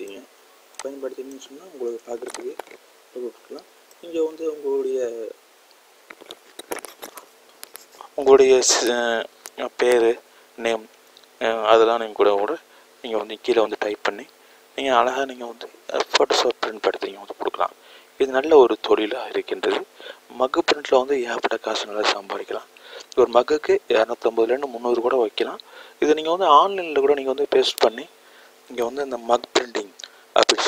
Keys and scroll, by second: 25.0 g.